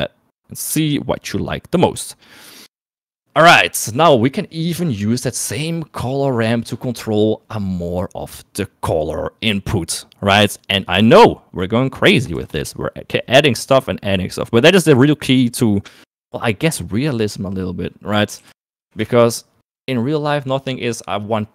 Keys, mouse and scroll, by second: 4.3 middle click, 4.9 middle click, 11.1 middle click, 12.6 shift+a.